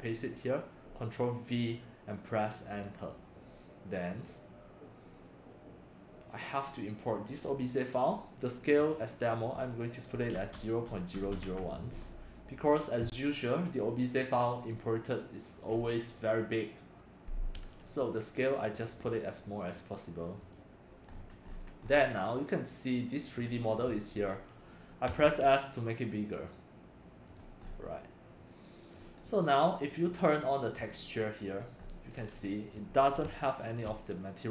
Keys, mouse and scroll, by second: 0.2 click, 0.4 ctrl+v, 2.8 Return, 4.1 click, 8.8 click, 10.1-11.4 typing, 19.7 click, 20.4 click, 20.8 drag, 21.1-22.0 scroll, 22.4-23.3 middle drag, 23.7 click, 24.2 middle click, 24.2-24.5 scroll, 25.0 s, 27.2-27.6 drag, 27.6 middle click, 28.3-28.9 drag, 29.2 click, 30.7 click, 31.8 scroll, 31.8 middle click, 31.8 scroll, 33.4-33.8 shift+middle drag, 34.0-34.5 shift+middle drag.